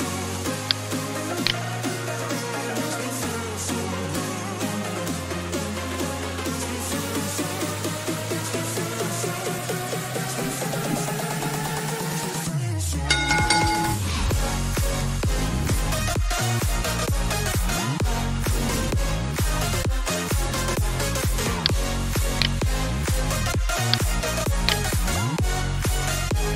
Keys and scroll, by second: 1.2-3.9 typing, 5.3-6.9 typing, 25.4-26.5 typing.